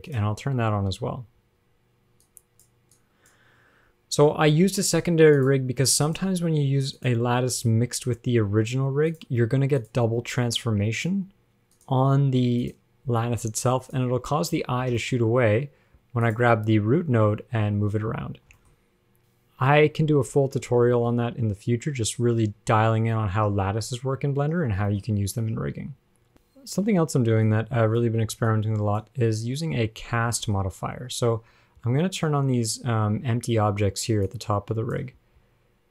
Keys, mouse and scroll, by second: 2.5 click, 3.2 click, 4.7 g, 6.3 click, 7.2 click, 7.9 g, 10.0 click, 10.7 g, 12.0 click, 12.9 click, 13.7 g, 14.8-15.2 scroll down 10, 15.2 shift+middle click, 15.4-15.8 scroll up 4, 16.5 click, 17.3 g, 18.8 shift+middle click, 19.0 scroll up 2, 19.8 a, 20.4 alt+r, 20.5 alt+g, 21.2 shift+middle click, 21.4-21.7 scroll up 2, 25.1 shift+middle click, 25.2 scroll up 1, 26.3 click, 27.7 click, 28.7 click, 30.2 scroll down 5, 30.6 shift+middle click, 31.4 scroll down 2, 31.7-33.4 scroll up 10, 34.5 click, 35.4-35.9 scroll down 7.